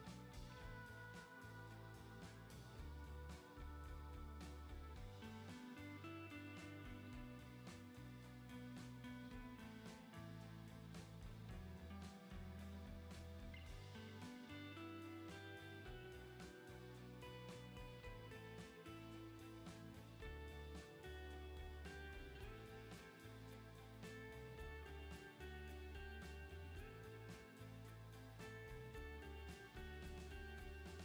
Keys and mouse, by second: 2.5 [, 3.3 ctrl+z, 6.2 click, 6.8 click, 7.4 ctrl+z, 9.8 middle click, 10.8 middle click, 12.6 ctrl+z, 14.5 click, 15.4 ctrl+z, 15.5 ctrl+z, 17.0 ctrl+z, 17.7 ctrl+z, 19.7 ctrl+z, 19.9 ctrl+z, 22.3-24.2 middle drag, 24.3 shift+middle click, 28.3 ctrl+z, 28.5 [, 28.6 [, 28.9 ctrl+z, 29.0 ], 29.1 ].